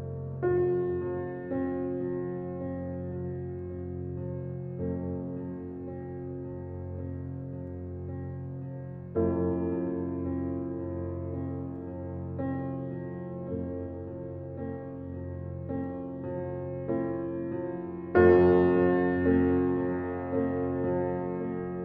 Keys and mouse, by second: 0.1 Tab, 2.5 Tab, 3.3 g, 3.7 x, 5.8 shift+click, 7.1 shift+click, 8.0 g, 8.3 x, 10.6 shift+click, 14.4 click, 15.6 Tab, 16.1 Left, 16.4 Left, 16.5 Left, 17.4 BackSpace, 17.8 k, 19.2 h.